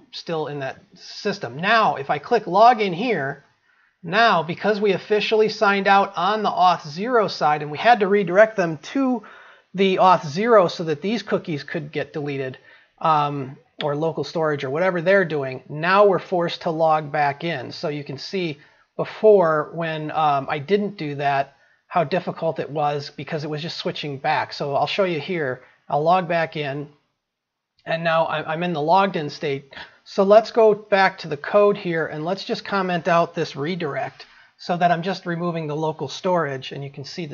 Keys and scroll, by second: 37.1 ctrl+s.